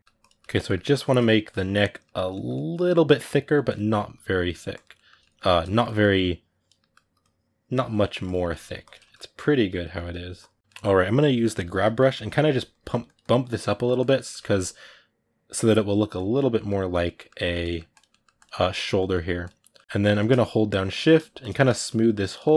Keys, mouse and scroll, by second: 0.0 click, 0.2-3.9 ctrl+middle drag, 3.9 click, 4.7-6.0 ctrl+middle drag, 6.0 click, 6.6 middle click, 7.0-8.2 drag, 8.2 middle click, 8.6 click, 8.8 ctrl+middle click, 9.1 click, 9.6 middle click, 10.2 click, 10.6 middle click, 11.3 g, 11.5 f, 11.9 middle click, 12.5 click, 13.4 middle click, 13.8 click, 13.9-15.7 ctrl+middle drag, 15.7 click, 16.3 middle click, 16.6 click, 16.8 middle click, 17.7 click, 17.9 middle click, 18.1 click, 18.8 middle click, 19.2 click, 19.4-20.6 ctrl+middle drag, 20.6 shift+click, 20.8 middle click, 21.2 shift+click, 21.3 middle click, 21.7 shift+click, 22.1 middle click, 22.4 shift+click.